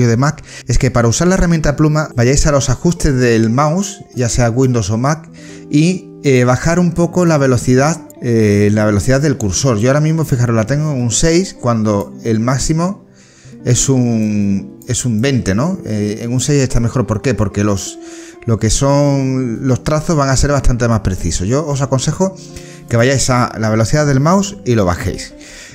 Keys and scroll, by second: 23.1 space.